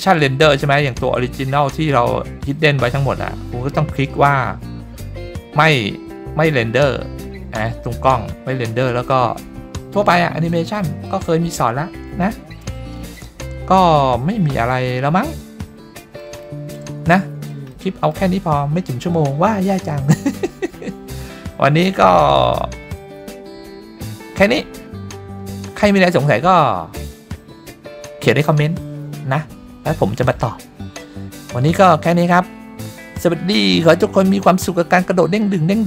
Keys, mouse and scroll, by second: 6.5-8.9 scroll down 2, 8.9-9.6 scroll down 1, 9.6 scroll down 1, 11.1-16.2 middle drag, 16.4-16.8 shift+middle drag, 17.2-17.5 middle drag, 17.7-18.1 shift+middle drag.